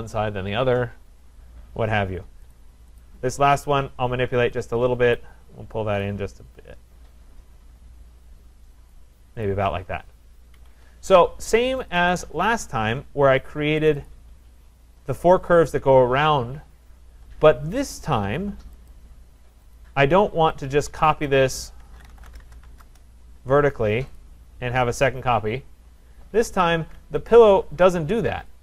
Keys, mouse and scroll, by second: 1.3-1.9 scroll, 1.9-2.6 scroll, 2.6 click, 3.0 click, 3.3 middle click, 5.2 click, 8.9 click, 9.5 click, 10.1 scroll, 10.6 Escape, 10.7 Escape, 11.9 click, 12.1 click, 13.9 click, 14.1 click, 14.8-15.3 scroll, 18.9 click, 19.7 click, 21.3 click, 21.6-23.1 typing, 24.2 click, 25.0 click, 26.2-27.0 typing, 27.3 click.